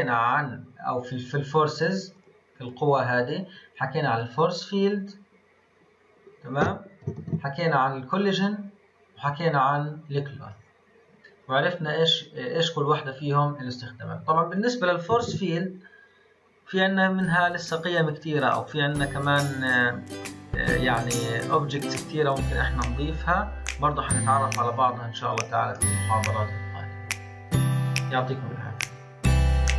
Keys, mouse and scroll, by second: 2.6 click, 4.1-7.2 drag, 7.2 ctrl+z, 14.5 click, 15.2 shift+a, 24.6 click, 25.3 click, 25.7-28.8 middle drag.